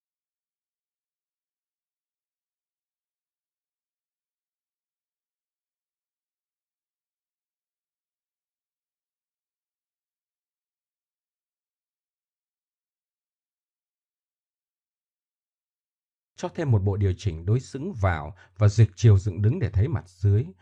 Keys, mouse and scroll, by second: 3.0-3.5 middle drag, 3.7 Tab, 4.2 Tab, 5.6 KP_1, 6.2 KP_1, 7.2 KP_1, 10.0 Tab, 12.7-14.3 middle drag, 14.7 middle click, 15.2 click, 17.9-20.6 drag.